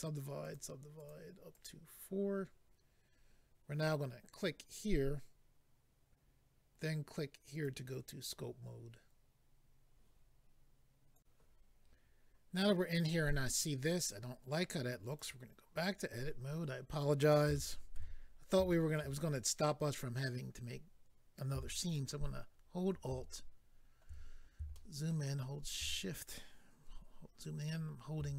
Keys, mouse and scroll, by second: 0.4 click, 0.5 click, 0.9 click, 1.0 double click, 1.5 double click, 1.6 double click, 4.3 click, 7.5 click, 11.1 click, 11.2 click, 15.1 click, 15.2 click, 15.7 click, 15.8 click, 16.4-17.1 scroll up 1, 17.5 shift+middle click, 18.2-18.7 scroll up 1, 18.7 shift+middle click, 19.2-20.2 scroll up 1, 20.4 scroll up 1, 21.8 alt+click, 22.0 alt+click, 24.3-24.7 scroll up 1, 24.7 shift+middle click, 25.3 shift+scroll up 1, 27.1-28.3 scroll up 3.